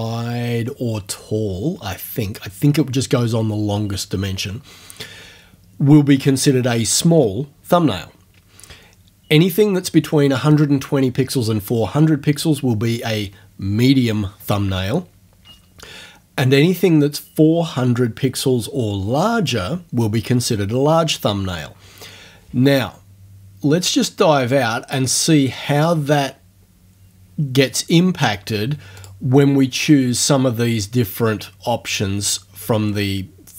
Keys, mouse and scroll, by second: 24.4 click, 29.0 click.